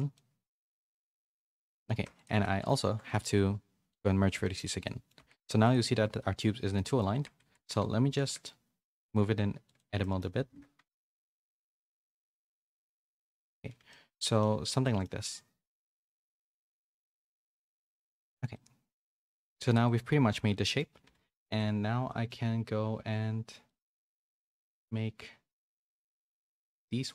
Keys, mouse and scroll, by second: 0.1 middle click, 1.1 Tab, 1.5 1, 2.0 Tab, 2.4 1, 2.9 a, 3.1 right click, 4.4 shift+middle click, 4.8 middle click, 5.1 Tab, 6.2 shift+middle click, 6.7 middle click, 7.4 a, 8.0 g, 10.0 middle click, 11.0 KP_1, 11.9-13.3 g, 13.3 Tab, 13.6 a, 13.7 a, 13.8 middle click, 14.8 shift+middle click, 16.2 Tab, 16.8-17.8 typing, 17.4 Tab, 17.9 middle click, 18.5 middle click, 19.1 a, 19.3 a, 19.5 shift+middle click, 19.8 middle click, 21.2 a, 22.0 middle click, 23.6 middle click, 24.1 middle click.